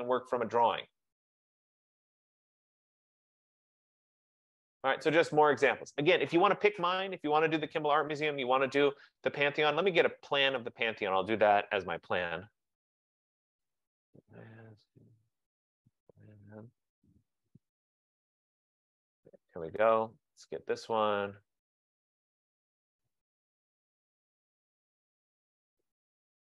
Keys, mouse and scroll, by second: 0.0 F15, 2.8-3.6 scroll, 3.8-5.7 scroll, 8.7 click, 9.8-10.2 scroll, 11.3 click, 11.9-17.1 typing, 14.2 scroll, 19.8 click, 21.0 click, 23.8-26.4 scroll.